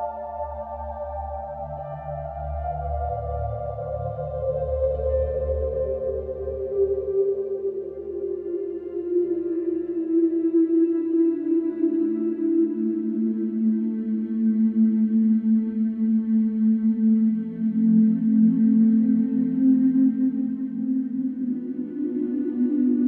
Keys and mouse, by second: 2.5 Delete, 3.2 middle click, 4.2 Delete, 6.1 Delete, 7.3 Delete, 7.8 Tab, 8.0 Tab, 9.4 middle click, 15.4 shift+middle click, 16.7-18.9 middle drag, 20.9 ctrl+z, 22.0 ctrl+z, 22.1 ctrl+z, 22.4-23.0 middle drag.